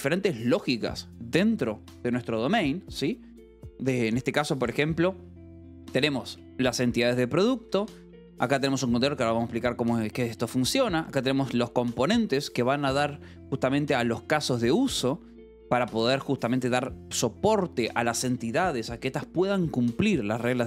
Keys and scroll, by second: 6.0-8.4 typing, 6.8 Escape, 8.8 Escape, 9.8 j, 10.9 j, 12.0 Escape, 15.6 k.